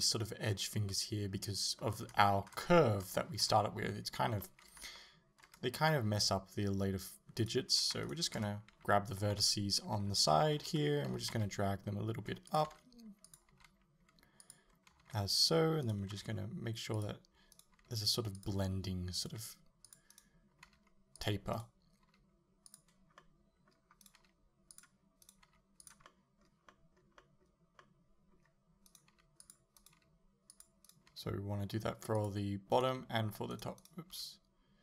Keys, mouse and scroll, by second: 2.1-7.4 shift+middle drag, 7.4 right click, 8.1 shift+right click, 9.5 KP_1, 10.3 ctrl+KP_3, 11.1 g, 12.6 click, 12.7 r, 13.4 click, 13.6 g, 14.5 click, 15.1 g, 15.5 click, 15.9 right click, 16.2 g, 17.1 click, 17.6 right click, 17.8 g, 18.5 click, 19.2 right click, 19.4 g, 20.0 click, 20.2 right click, 20.7 g, 21.3 click, 21.6 right click, 22.1 g, 22.8 click, 23.2 middle click, 24.1 right click, 24.2 g, 24.8 click, 25.3 right click, 25.5 g, 26.1-28.9 middle drag, 28.9 right click, 29.2 g, 29.5 click, 29.8 right click, 30.0 g, 30.7 click, 30.9 right click, 31.2 g, 32.3 click, 32.8 right click, 32.9 g, 33.8 right click, 34.2 g.